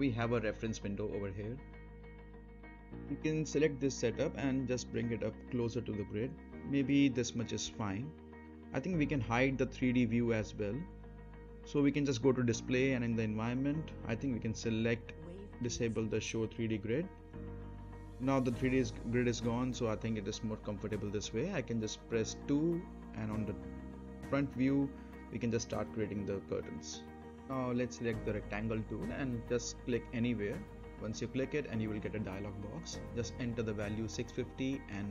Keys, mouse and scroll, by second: 0.2 scroll down 1, 0.4 middle click, 0.7-1.4 scroll down 1, 1.7-2.1 middle click, 1.8-2.4 right drag, 2.4-7.1 drag, 7.3-8.3 right click, 8.4-8.7 scroll up 1, 8.7 middle click, 9.1 right click, 11.7 right click, 11.7 click, 14.2 click, 15.0 right click, 15.7 click, 16.1-17.9 right drag, 18.0 scroll down 1, 18.7 2, 19.1-19.8 scroll down 1, 19.8-20.5 middle click, 20.5 scroll up 1, 20.9-21.5 middle drag, 22.5 scroll down 1, 23.1-24.1 middle drag, 24.7-25.4 click, 25.7-26.3 middle drag, 28.6 middle click, 28.6 click, 32.0-33.0 typing, 33.8 click, 34.8 typing.